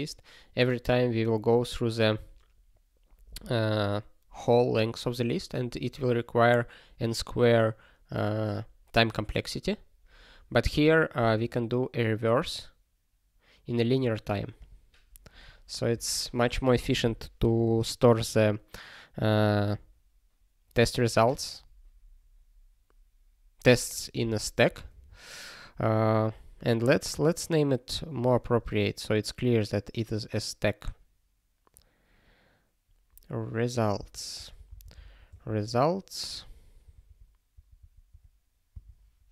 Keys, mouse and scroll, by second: 12.4 click, 14.0 click, 15.9 ctrl+p, 25.6-25.9 scroll up 1, 27.0 scroll down 1, 28.8 scroll up 1, 34.3 ctrl+r, 34.7-35.7 typing, 36.3 ctrl+r, 38.7 Return.